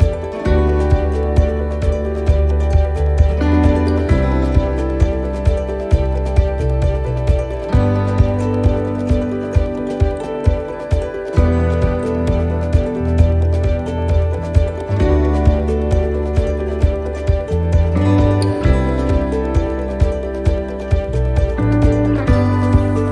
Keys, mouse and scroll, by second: 3.5 ctrl+r, 12.2 middle click, 15.6 middle click, 17.2 middle click, 21.1 right click, 22.5 alt+shift+right click.